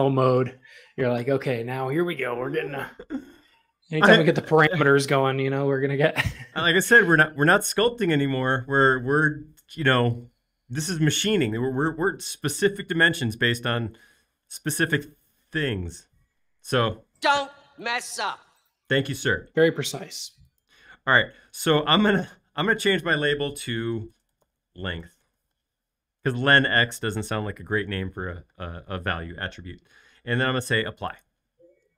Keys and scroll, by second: 23.9-25.7 typing.